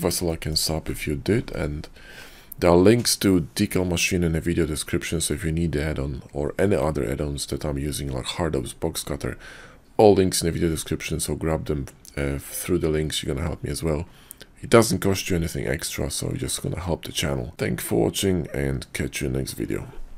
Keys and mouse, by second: 0.3 shift+drag.